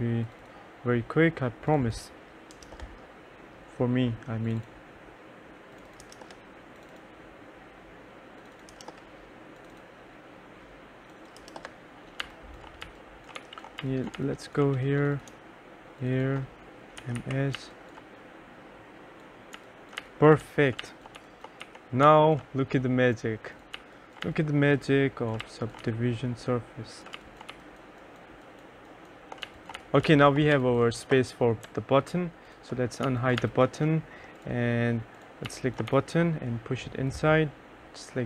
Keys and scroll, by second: 2.7 0, 2.8 Return, 6.2 0, 6.3 Return, 8.8 0, 9.0 Return, 11.5-14.8 typing, 11.6 Return, 16.9-18.2 typing, 19.5-22.7 typing, 23.9 2, 24.4 3, 25.6 2, 25.9 3, 27.3 2, 27.6 1, 29.3-31.2 typing, 33.2 2, 33.5 3, 35.6 2, 36.0 1.